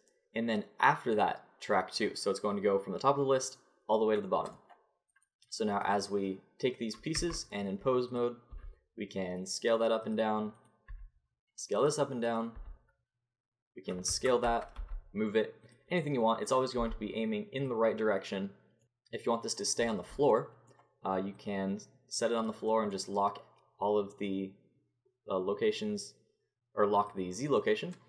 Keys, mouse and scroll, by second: 5.1-7.1 drag, 7.1 Tab, 7.6 click, 7.8 middle click, 8.5 s, 10.6-14.2 drag, 10.9 s, 12.6 s, 14.8 g, 16.8 g, 19.2-20.7 drag, 21.4-23.1 drag, 27.0-28.0 drag.